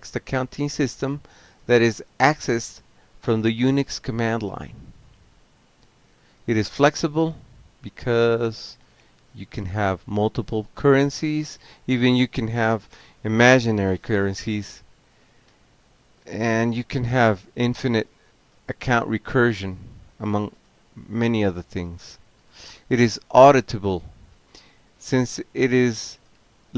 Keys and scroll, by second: 0.0-1.3 typing, 1.5 Down, 1.6 Down, 1.7 Down, 1.8 Down, 2.3 Left, 5.1 ctrl+c, 5.4 ctrl+k, 6.6-7.6 typing, 9.5 Return, 10.2 Delete, 10.3 Delete, 10.5-11.4 typing, 12.5 alt+q, 15.3 alt+b, 15.4 alt+b, 16.5 ctrl+c, 16.8 ctrl+p, 17.8 Return, 25.3 ctrl+c, 26.1 ctrl+a.